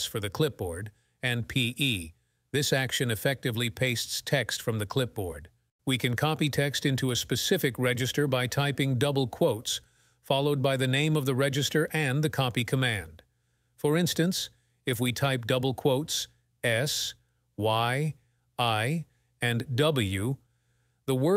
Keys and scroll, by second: 9.5 ", 15.6-16.4 typing.